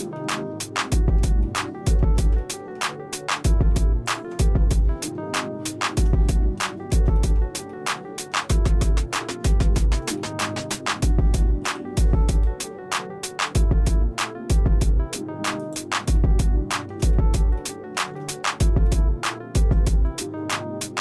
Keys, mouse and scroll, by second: 0.2-1.3 shift+middle drag, 1.5 shift+middle click, 2.4 middle click, 4.1 ctrl+click, 5.1 shift+middle click, 6.2 scroll down 2, 6.4 scroll up 1, 6.7 shift+middle click, 7.2 middle click, 7.7 shift+middle click, 8.5-8.8 scroll up 2, 9.1 scroll down 1, 9.5 middle click, 10.2 shift+middle click, 11.7 i, 16.2 shift+middle click, 17.2 middle click, 17.6 shift+middle click, 18.2 shift+middle click, 18.9 shift+middle click, 20.1 scroll up 1.